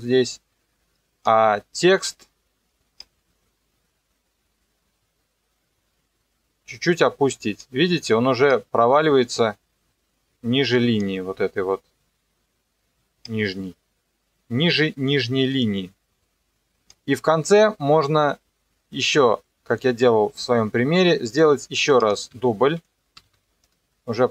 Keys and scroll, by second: 23.2 ctrl+d.